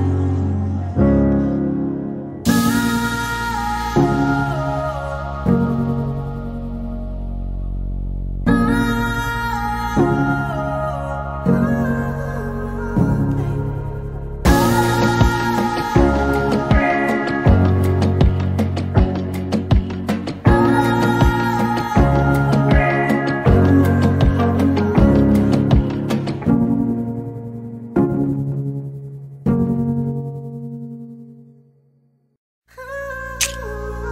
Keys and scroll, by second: 0.1 typing, 1.0 Return, 6.9-7.9 typing, 24.8-26.0 typing, 31.0-32.1 typing, 32.3 Return.